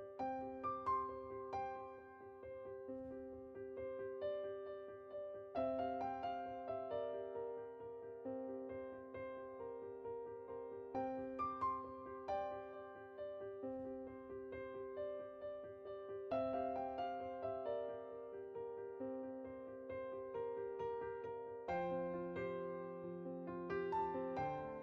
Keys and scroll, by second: 0.8 1, 5.8 typing, 16.7 typing.